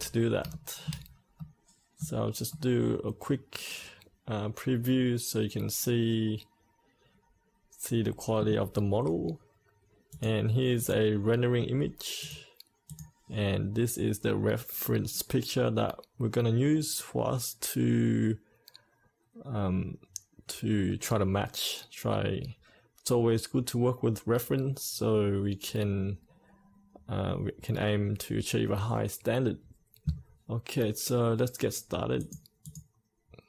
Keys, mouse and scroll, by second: 0.4-9.3 shift+middle drag, 10.0-33.4 drag.